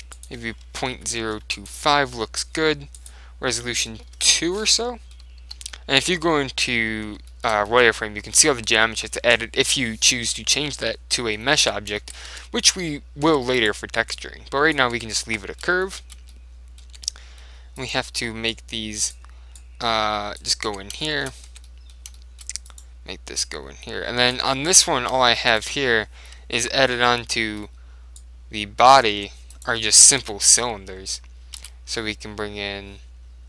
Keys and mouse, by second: 0.3 click, 3.1 click, 4.7-9.5 middle drag, 5.5 z, 9.8-11.3 middle drag, 11.7 Tab, 12.4 Tab, 12.8 z, 13.4 Tab, 13.7 right click, 15.0 Tab, 15.2 click, 17.0 Tab, 17.2-18.6 middle drag, 17.9-19.5 drag, 18.6-19.8 right drag, 19.8 click, 20.8 Tab, 21.6 Tab, 21.8-23.9 middle drag, 22.8-24.7 right drag, 23.5 click, 25.4-28.1 middle drag, 28.3 click, 29.2 Tab, 29.6 right click, 29.9-31.3 middle drag, 30.3 Tab, 31.7 shift+a.